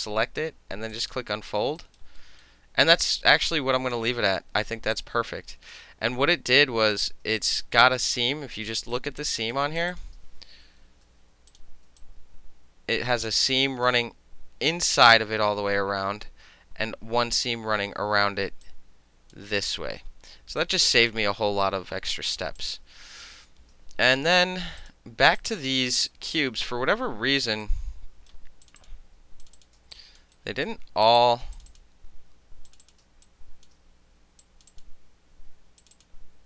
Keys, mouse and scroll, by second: 0.9 click, 1.8 alt+right click, 2.2-3.1 alt+middle drag, 3.1-4.1 alt+drag, 4.1 alt+middle click, 4.9 alt+click, 5.7 alt+middle click, 6.4-6.9 alt+right drag, 6.9-7.4 alt+middle drag, 7.4 alt+click, 7.6 alt+middle drag, 8.0 alt+middle click, 8.1 alt+right click, 8.2-8.9 alt+middle drag, 8.9 alt+right click, 9.5 alt+middle click, 9.8 alt+click, 9.9 click, 10.8 shift+i, 11.5 click, 12.0-13.9 alt+drag, 18.7 alt+click, 20.6 alt+right click, 20.9 alt+click, 21.6 right click, 22.6 click, 23.6 shift+i, 24.8 click, 25.4 alt+click, 26.1 alt+right click, 27.6-28.3 right drag, 28.7 click, 28.8 click, 29.4 shift+click, 29.6 shift+click, 29.8 alt+shift+middle click, 30.0 alt+click, 30.2 alt+middle click, 30.4 alt+right click, 30.7 alt+shift+middle click, 31.1 shift+click, 31.2 shift+click, 31.3 shift+middle click, 31.6 shift+click, 31.6 shift+middle click, 31.7 shift+click, 31.8-32.7 shift+middle drag, 32.7 shift+click, 32.8 shift+middle click, 32.8 shift+click, 32.9-33.3 alt+shift+middle drag, 33.3 alt+click, 33.7 alt+shift+middle click, 34.4 shift+click, 34.6 shift+middle click, 34.7 shift+click, 35.8 shift+click, 36.0 shift+click.